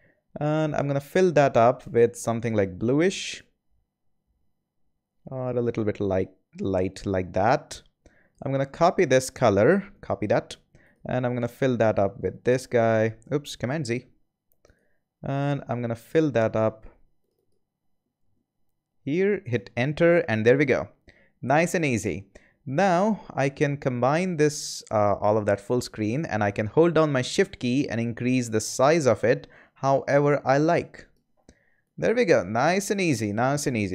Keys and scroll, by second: 9.9 super+c, 12.3 super+v, 13.6 super+z, 18.1 super+v, 19.4 Return.